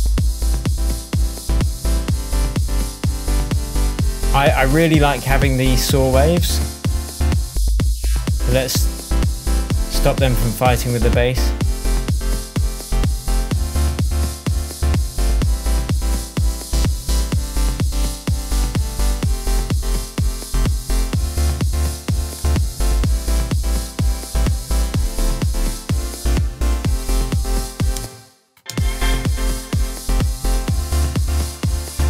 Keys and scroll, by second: 27.9 space.